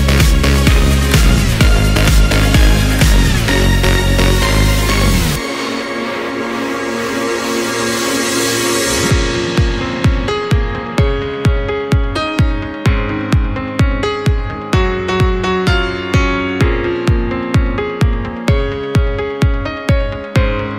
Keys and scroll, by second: 8.3 ctrl+c.